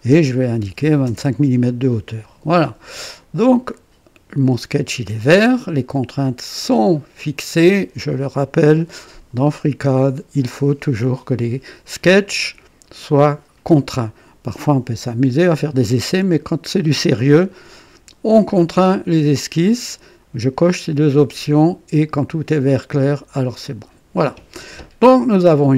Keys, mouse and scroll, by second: 0.6-1.0 typing, 1.0 Return, 2.1 typing, 23.3 click, 25.4 click.